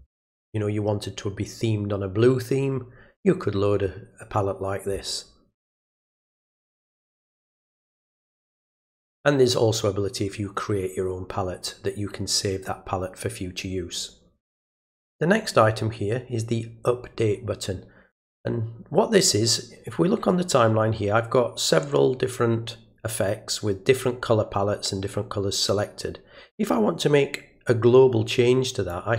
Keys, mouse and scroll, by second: 5.5 click, 7.1 click, 28.9-29.1 drag.